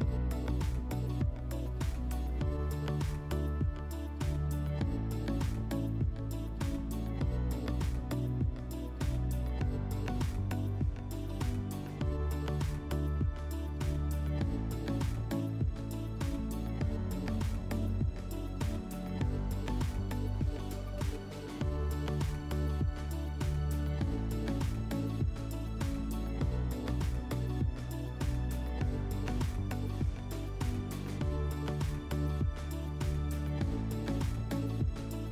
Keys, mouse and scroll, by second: 1.6-2.2 drag, 8.9 click, 9.1 click, 9.6-10.5 typing, 10.6 Return, 11.9-12.9 typing, 14.3-15.1 typing, 15.3 Return, 17.3 typing, 18.1 click, 22.1 click, 24.9 click, 25.6 0, 26.0 Return.